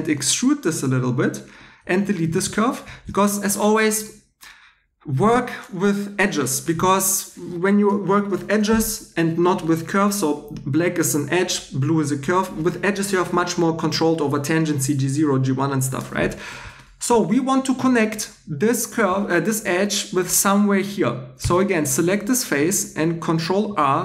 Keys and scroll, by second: 1.6-2.7 typing, 21.4 3, 23.6 super+r.